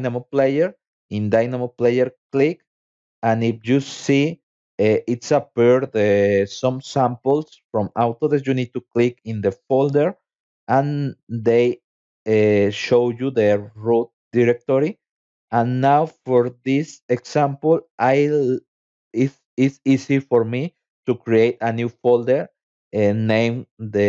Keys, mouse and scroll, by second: 1.7 click, 8.2-9.6 drag, 16.9 click, 17.1-18.8 typing, 20.5 -, 21.6 shift+e, 22.4 shift+u.